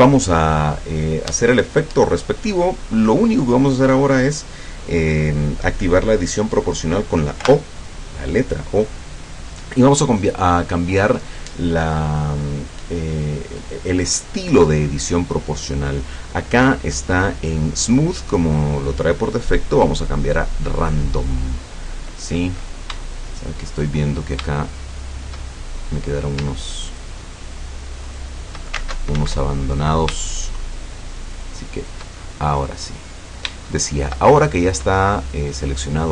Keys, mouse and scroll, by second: 7.5 o, 10.5 click, 20.7 click, 22.0-22.5 scroll up 2, 23.1 shift+middle click, 24.1-24.6 shift+scroll up 2, 24.6 shift+middle click, 25.5-25.9 shift+scroll up 1, 26.9 shift+right click, 28.1 shift+right click, 29.2 ctrl+alt+z, 29.6 ctrl+alt+click, 30.3 shift+click, 31.3 shift+right click, 31.8 shift+right click, 32.9-34.3 middle drag, 34.7-35.1 scroll down 2, 35.1-35.9 middle drag.